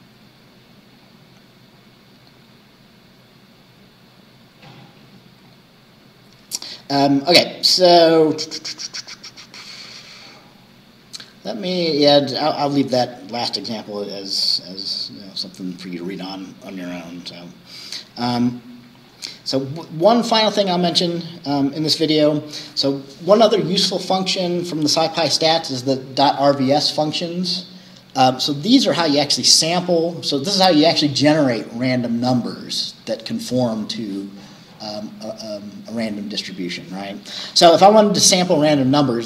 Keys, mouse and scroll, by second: 0.9-1.3 scroll down 2, 2.6 scroll up 2, 5.5-5.8 scroll up 2, 6.7 scroll down 2, 7.5-8.6 scroll down 6, 9.9 scroll up 2, 10.2 scroll down 2, 11.9-12.4 scroll down 4, 12.4 scroll up 2, 13.5-14.9 scroll down 5, 18.1-18.8 scroll down 1.